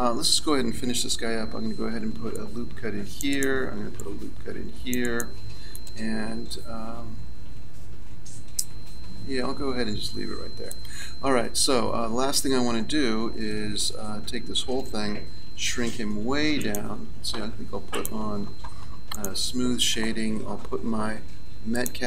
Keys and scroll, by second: 2.0 ctrl+r, 14.2 Tab, 15.7 s.